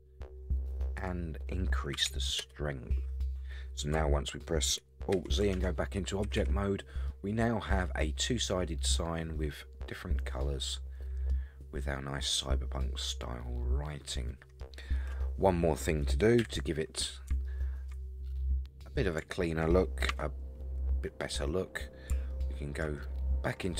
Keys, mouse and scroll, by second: 1.0-3.1 drag, 5.1 alt+z, 5.6 Tab, 6.2 a, 6.4 a, 7.0 scroll down 1, 7.1-11.3 middle drag, 11.8-12.3 scroll up 4, 12.3-14.6 middle drag, 16.4 KP_1, 17.4-17.9 shift+middle drag, 18.3 scroll up 2, 18.7-19.2 scroll down 2, 19.3-19.7 shift+middle drag, 20.1 Tab, 20.7-21.1 scroll up 3, 22.3 alt+middle click.